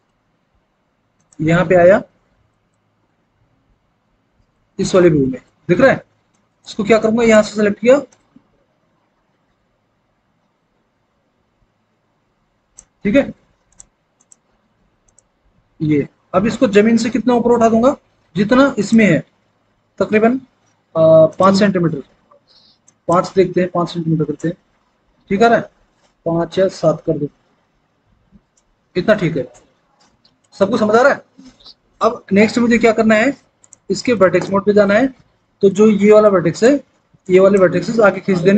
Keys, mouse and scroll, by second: 3.3 alt+w, 4.6 alt+w, 23.7 KP_5, 24.1 Return, 27.8 KP_7, 28.3 Return, 30.6 alt+w, 31.5 alt+w, 34.1 alt+w, 35.0 alt+w.